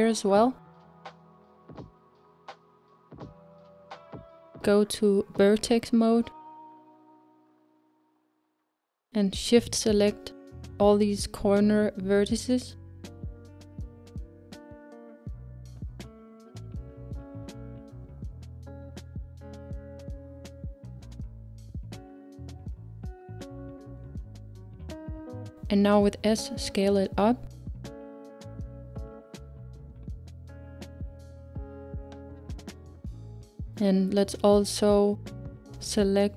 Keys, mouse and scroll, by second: 1.1 ctrl+r, 4.6-8.7 middle drag, 8.7-11.4 drag, 12.6 shift+click, 13.8 shift+click, 15.4 shift+click, 16.3-19.2 middle drag, 19.2 shift+click, 20.4 shift+click, 21.7 shift+click, 22.8 shift+click, 23.8-26.1 middle drag, 26.1 s, 30.6-36.3 middle drag.